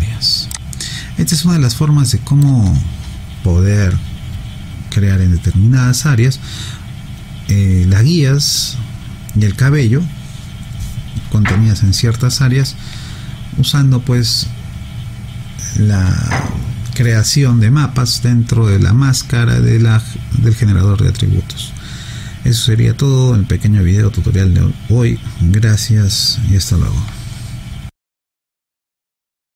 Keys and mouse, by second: 0.5 alt+click.